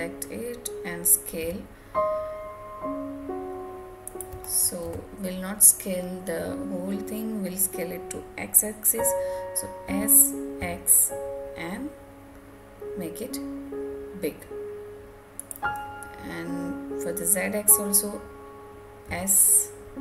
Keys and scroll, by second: 4.8 ctrl+z.